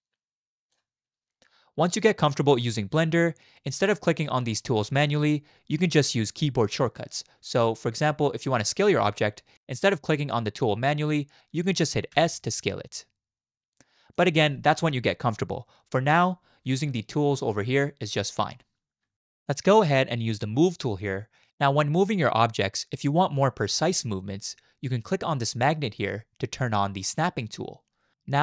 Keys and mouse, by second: 3.0 shift+click, 3.1 shift+middle click, 12.1 s, 26.0 click.